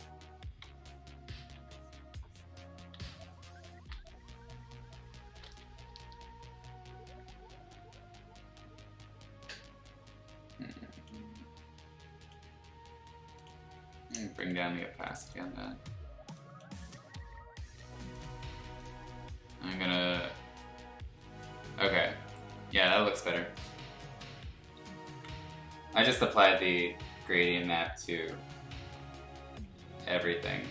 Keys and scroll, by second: 0.6 x, 1.6 ctrl+z, 2.9 x, 3.9 ctrl+z, 5.8 ], 6.0 ], 7.6 ctrl+z, 24.1 b, 25.1 ctrl+z, 28.4 ], 28.6 ], 30.6 ctrl+z.